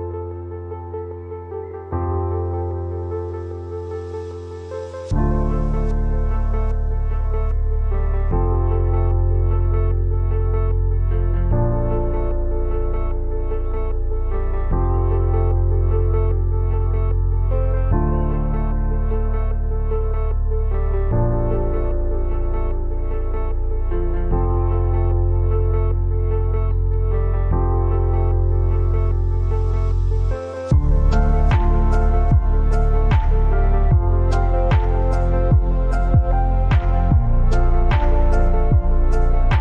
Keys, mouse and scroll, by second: 6.5-10.9 drag, 8.4-9.7 drag, 14.5 click, 14.5 click, 19.9 Down, 21.0 Down, 23.0-26.1 drag, 27.5 right click, 28.7 click, 28.7 click, 32.3 ctrl+v, 33.3 click, 36.8 click, 37.8 Down, 39.3 Down.